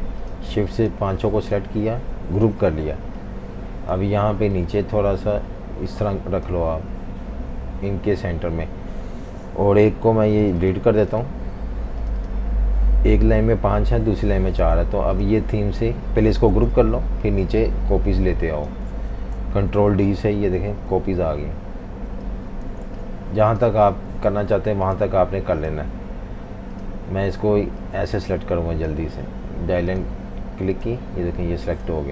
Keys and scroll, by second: 2.3 super+g, 11.4 Delete, 16.5 super+g, 19.4 super+-, 19.5 super+-, 19.9 super+d, 20.1 super+d, 20.4 super+d, 20.5 super+-, 20.8 super+-, 21.1 super+d, 21.3 super+d, 21.9 super+d, 22.7 typing, 23.9 typing.